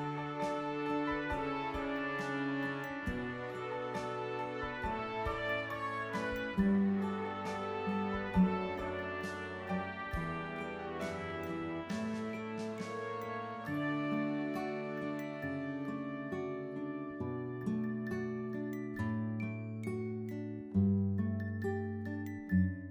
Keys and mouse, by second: 0.0-5.7 typing, 5.9 click, 9.0 click, 11.0 click, 12.9 click, 15.1 click, 16.0 click, 16.6 click, 18.9 click.